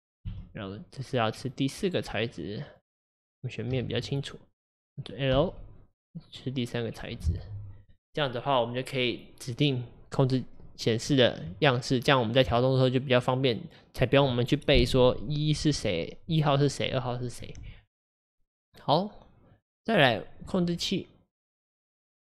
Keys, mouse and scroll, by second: 1.4 Left, 1.4 click, 2.2 Left, 2.2 click, 2.8 Left, 3.8 2, 4.2 Left, 5.4 l, 6.3 Left, 6.3 click, 7.0-12.5 drag, 12.5 Tab, 19.6 click.